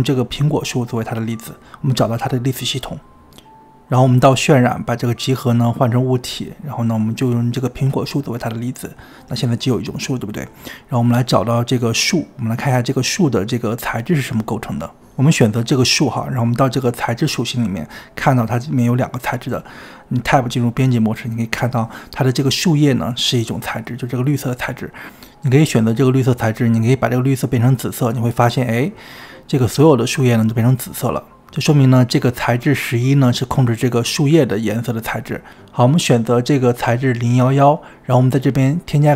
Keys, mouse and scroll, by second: 15.5 click, 22.4 Tab, 26.7-28.8 drag, 38.0 shift+a.